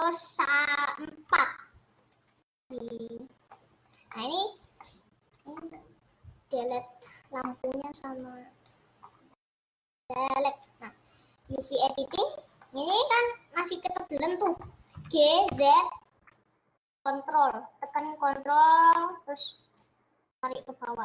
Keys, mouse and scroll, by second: 2.7-3.9 middle drag, 3.9 click, 4.1-5.4 middle drag, 5.4 scroll down 2, 5.6-7.1 middle drag, 7.1-7.6 scroll down 7, 7.6-8.8 middle drag, 8.8 click, 9.1 scroll down 3, 9.4 scroll up 3, 10.0 Delete, 11.7 click, 11.9 scroll up 4, 12.1 middle click, 12.8 scroll down 3, 13.0-15.0 middle drag, 15.0 g.